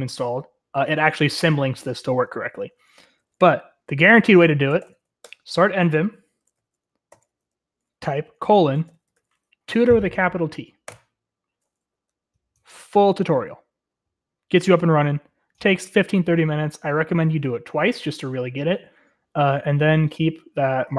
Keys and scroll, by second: 2.9 BackSpace, 4.4-5.7 typing, 6.8-9.6 typing, 10.8 Return, 11.6-13.2 typing, 18.8-20.5 typing.